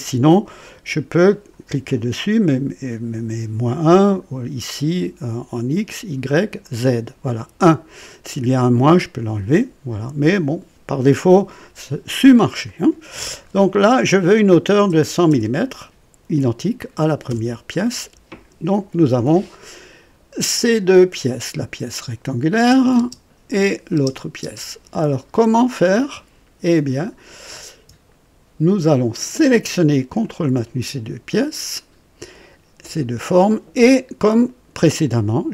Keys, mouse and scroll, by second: 1.3 click, 4.0 click, 5.8 click, 6.6 click, 12.6 click, 14.4 KP_1, 14.9 KP_0, 15.3 KP_0, 16.7 typing, 17.2 KP_Enter, 21.9 click, 22.6-24.4 typing, 23.5 click, 30.2 ctrl+click.